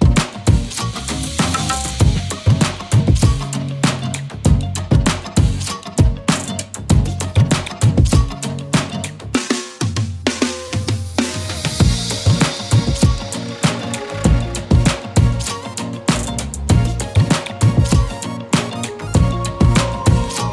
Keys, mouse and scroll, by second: 10.2 shift+click, 12.4 alt+click, 13.3 click.